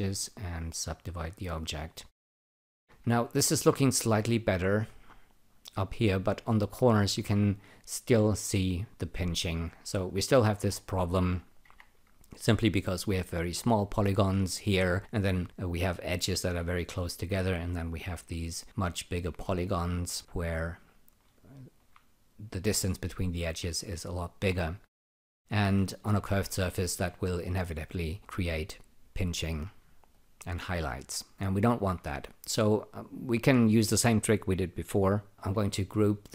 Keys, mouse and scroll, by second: 0.7 alt+click, 1.3 alt+right click, 1.7 alt+click, 2.0 alt+right click, 2.6 ctrl+r, 7.5 scroll up 2, 10.6 scroll down 2, 11.6 q, 21.3 alt+click, 25.2 alt+middle click, 30.1 alt+click, 35.4 alt+g.